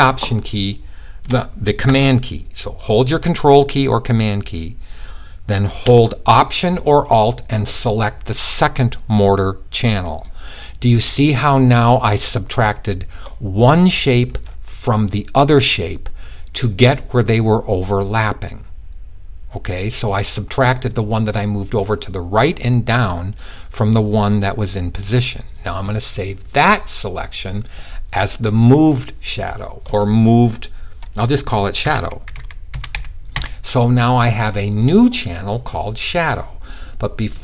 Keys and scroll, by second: 31.2-32.7 typing.